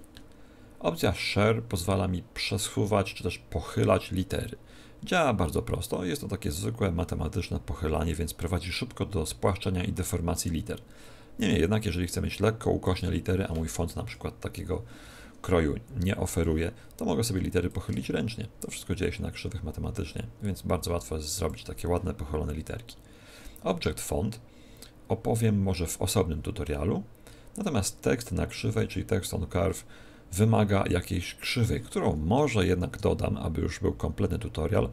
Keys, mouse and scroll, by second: 4.1 click, 13.9 KP_1, 17.6 click, 32.6 shift+a.